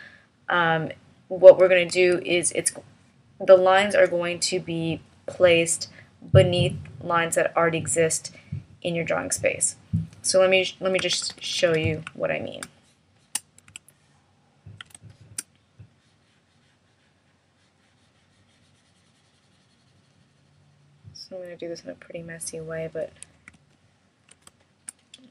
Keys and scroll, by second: 1.9 alt+v, 11.1 super+=.